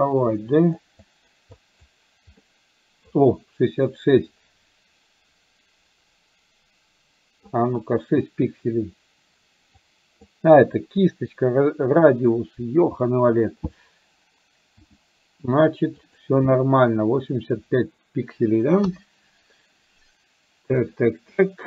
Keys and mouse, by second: 1.1 click, 1.6 click, 2.4 middle click, 4.3-7.4 drag, 9.9 click, 14.8 f, 18.8 KP_1.